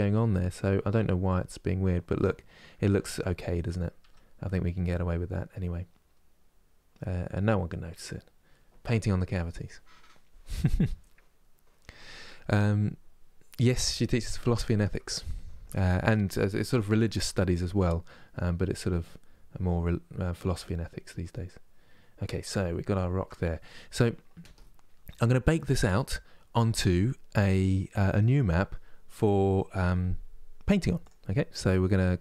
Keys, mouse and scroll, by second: 3.7 Tab, 4.3-7.3 middle drag, 17.0-32.2 shift+middle drag.